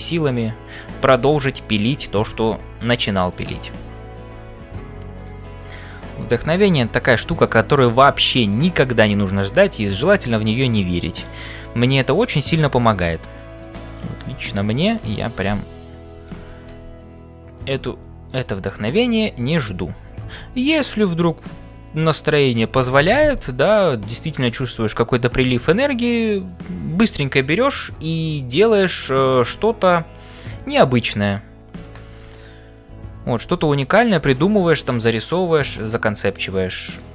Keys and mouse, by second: 0.0-37.1 typing, 1.4 ctrl+s, 2.1 shift+middle click, 3.3 click, 5.6 click, 7.4 click, 10.7-12.5 middle drag, 13.2 click, 13.9 click, 19.6 click, 23.6 middle click, 33.4 click, 34.0-36.5 middle drag.